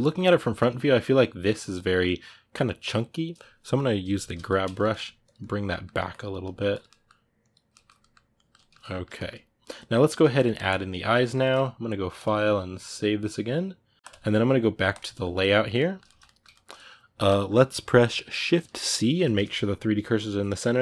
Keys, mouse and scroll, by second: 3.8 g, 4.0 f, 4.6 ctrl+middle click, 5.1 click, 5.4 middle click, 5.9 click, 6.2 middle click, 6.6 click, 6.6 middle click, 7.2 click, 7.5-14.9 middle drag, 14.9-20.8 drag.